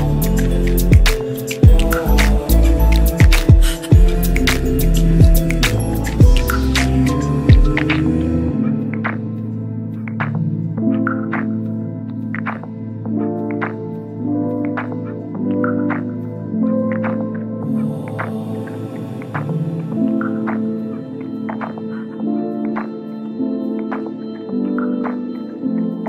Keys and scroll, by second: 8.3 w, 17.1 F9.